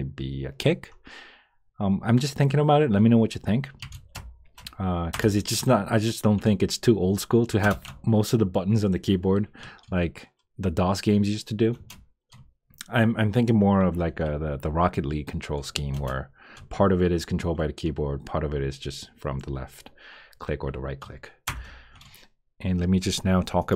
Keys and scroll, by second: 4.1 Return, 5.1 Return, 7.6 Return, 11.7 Return, 15.9 Return, 21.4 Return.